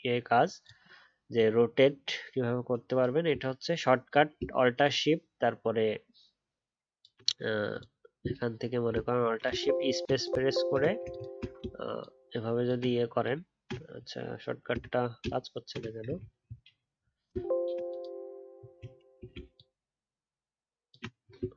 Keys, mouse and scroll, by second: 4.8 alt+shift+click, 9.4 alt+shift+space, 10.1 alt+shift+click, 10.3 alt+shift+space, 11.0 shift+click, 11.5 shift+space, 11.9 shift+click, 12.1 shift+space, 17.3 alt+shift+space, 17.9 alt+shift+click.